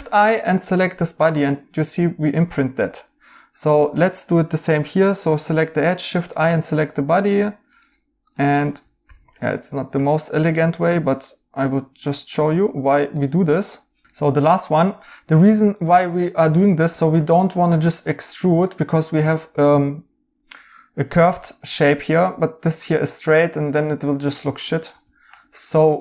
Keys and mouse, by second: 1.5 right click, 5.2 i, 7.3 right click, 9.0 i, 11.2 right click, 15.1 right click, 15.4 right click, 18.6 right click, 22.1 right click, 24.8 ctrl+z, 25.5 right click.